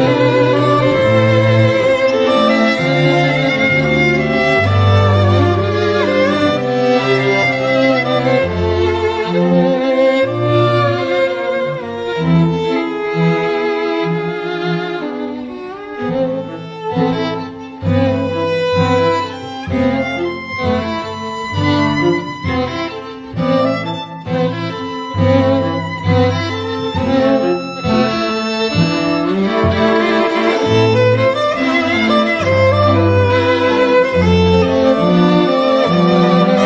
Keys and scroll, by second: 2.0 x, 5.3 alt+z, 7.7 x, 9.1 [, 9.7 [, 18.1 x.